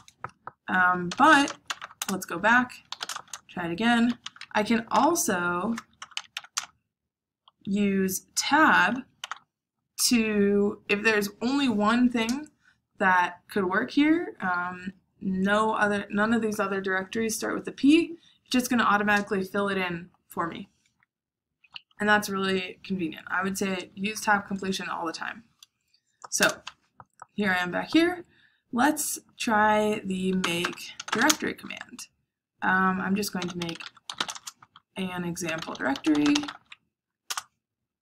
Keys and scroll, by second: 0.8-7.8 typing, 9.2 Tab, 26.3 Return, 30.1-31.6 typing, 33.0-36.9 typing, 37.2 Return.